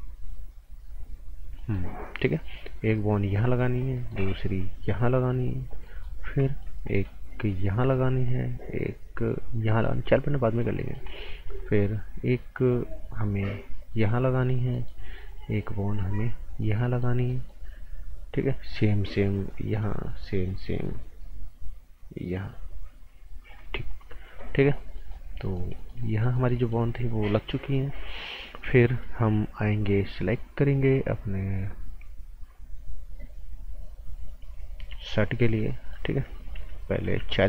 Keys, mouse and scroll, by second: 1.3 scroll up 1, 1.6 right click, 2.4 click, 3.9 right click, 4.6 click, 5.8 right click, 6.1 scroll down 1, 6.4 right click, 6.7 scroll up 1, 6.9 right click, 7.5 click, 10.8 right click, 11.4 scroll up 1, 11.6 right click, 13.6 click, 14.7 right click, 15.6 click, 16.8 right click, 18.4 click, 19.7 right click, 20.3 click, 24.0 right click, 35.0 alt+Num_Lock, 35.1 right click, 37.0 b, 37.3 scroll up 1.